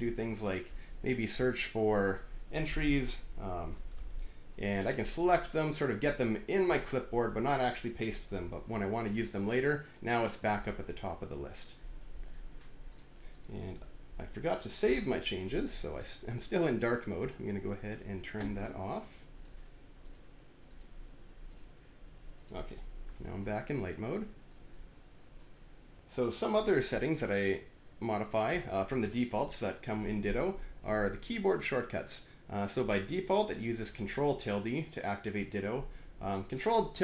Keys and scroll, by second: 3.2-4.2 typing, 8.6 alt+`.